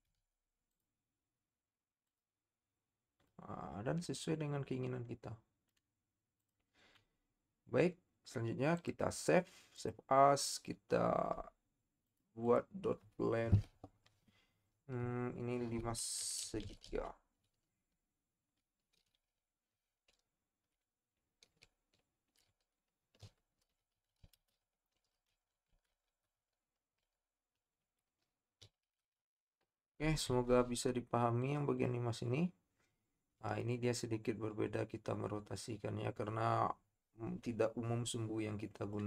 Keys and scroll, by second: 0.3 z, 14.9 BackSpace, 16.2-16.7 typing, 17.9 Home, 19.7 Caps_Lock, 20.1 Right, 21.6 BackSpace, 23.2-24.6 typing, 26.1-29.0 typing.